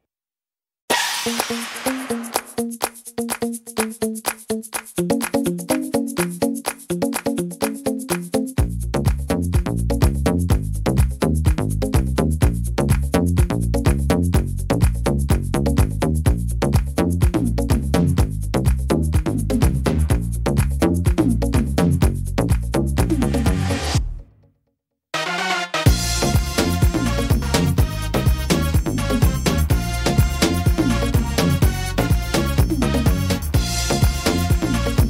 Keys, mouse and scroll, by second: 2.8 ctrl+r, 6.4 ctrl+z, 7.5 ctrl+r, 10.1 ctrl+r, 11.6 ctrl+r, 13.6 ctrl+r, 15.5 right click, 15.9 shift+right click, 16.4 shift+right click, 16.8 right click, 17.5 x, 18.9 middle click, 20.9 right click, 21.3 shift+right click, 21.8 right click, 22.2 right click, 23.0 x, 24.1 middle click, 25.0-25.3 scroll up 2, 25.3 middle click, 26.1 right click, 26.6 shift+right click, 27.0 middle click, 27.5 shift+right click, 27.9 shift+right click, 28.7 f, 28.9 middle click, 29.6 right click, 30.0 right click, 30.9 right click, 31.2 shift+right click, 31.9 shift+right click, 32.3 shift+right click, 32.7 middle click, 33.3 f, 33.5 middle click, 34.1 right click, 34.5 shift+right click.